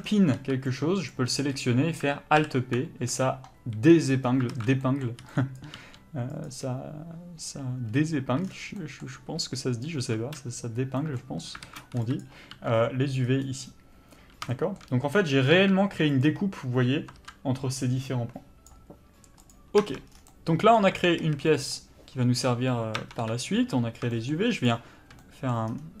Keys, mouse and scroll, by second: 1.1 b, 2.4 alt+p, 4.5 alt+a, 6.4 click, 10.0 1, 11.7 alt+a, 12.2 b, 12.6 g, 16.2 click, 17.2 ctrl+z, 19.7 click, 20.0 Tab, 20.3 scroll down 1, 20.4-21.1 scroll up 1, 21.1 Tab, 21.4 a, 21.7 middle click, 23.2 Tab, 23.4 KP_Divide, 24.3 shift+middle click, 24.8 shift+click, 25.4 middle click, 25.9 scroll down 1.